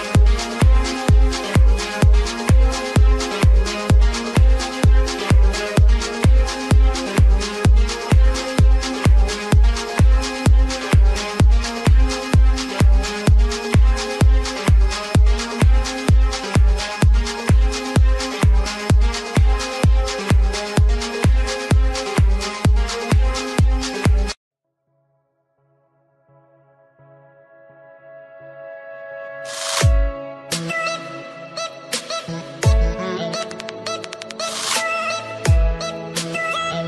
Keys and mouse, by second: 1.4 click, 2.6-6.5 typing, 2.8 click, 4.5 click, 6.0 click, 9.3 click, 10.4 click, 12.0 click, 13.5 click, 15.7 click, 18.8 click, 19.1 click, 23.0 click, 23.7 Return, 23.8-27.0 typing, 24.3 click, 24.7 click, 32.1 click.